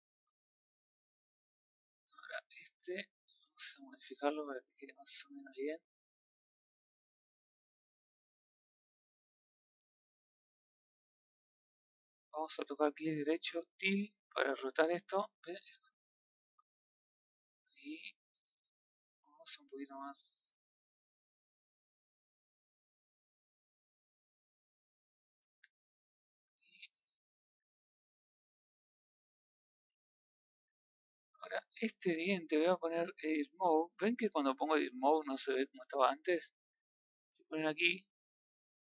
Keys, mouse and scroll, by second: 1.2-1.5 scroll up 1, 1.5-2.6 middle drag, 2.6 click, 2.7-4.2 middle drag, 4.2 Tab, 8.0-9.1 middle drag, 9.1 click, 10.2-12.3 middle drag, 13.7 right click, 18.2-19.4 middle drag, 19.4 click, 20.7 middle click, 21.2 g, 23.1 click, 24.3-26.7 middle drag, 26.7-27.1 scroll down 3, 27.1 middle click, 28.0 middle click, 28.7-30.6 middle drag, 30.6 Tab, 31.9-33.4 middle drag, 33.4 Tab, 37.9 click.